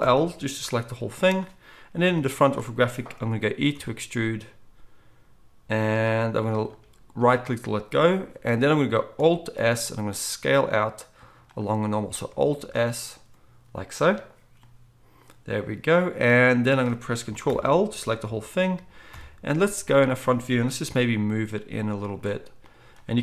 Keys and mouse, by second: 0.0 ctrl+l, 0.8 g, 2.0 KP_1, 3.7 e, 9.6 alt+s, 17.5 ctrl+l, 18.2 KP_3, 19.1 KP_1, 19.5 z, 20.9 g.